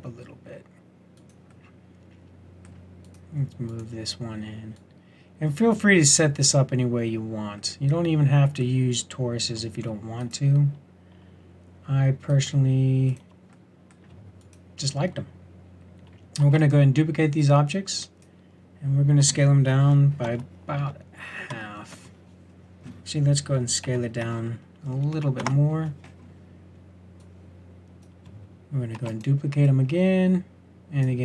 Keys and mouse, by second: 1.7 click, 16.4 shift+d, 19.1 s, 23.8 s, 28.9 shift+d.